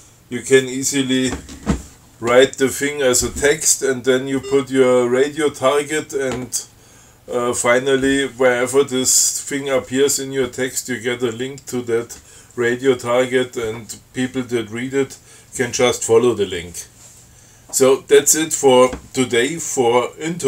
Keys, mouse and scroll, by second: 4.4-4.9 scroll up 2.